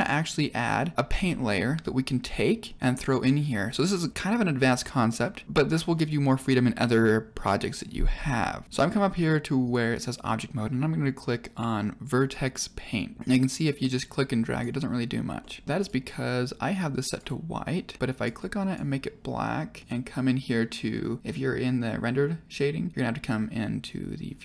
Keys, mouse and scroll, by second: 5.0 middle click, 5.4 scroll down 2, 8.6 click, 9.6-12.4 drag, 13.1 middle click, 13.3-14.5 drag, 15.3 click, 15.3 middle click, 17.8 click, 18.4 click, 19.9 click.